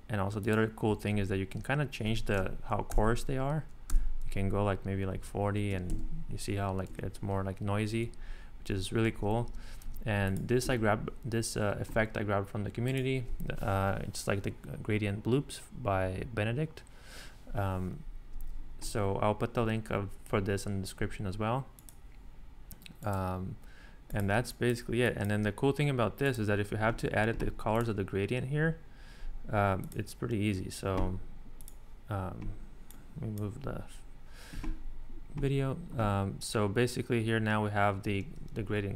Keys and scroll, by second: 2.9 shift+Up, 3.9 shift+Up, 5.1 shift+Up, 5.9 Escape, 6.9 Escape, 9.1 super+z, 10.6 Escape, 24.4 space.